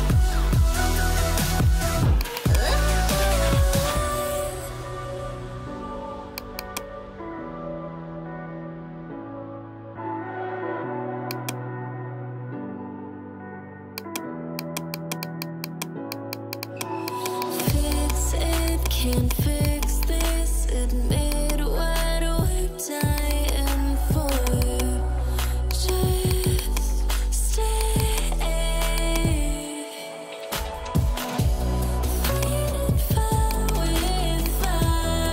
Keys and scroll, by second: 0.0-1.1 typing, 3.6-5.6 typing, 7.0-10.4 typing.